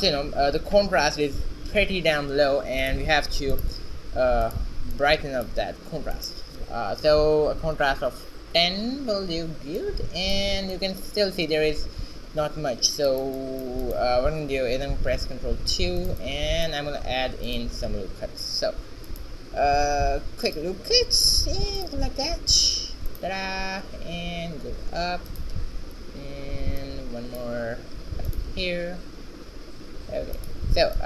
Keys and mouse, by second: 1.8 shift+a, 4.6-9.9 drag, 9.9-12.9 middle drag, 12.9 shift+z, 13.2-15.0 middle drag, 15.0 ctrl+2, 15.5 Tab, 16.9 ctrl+r, 19.9 ctrl+r, 22.5 ctrl+r, 28.1 ctrl+r, 30.6 a.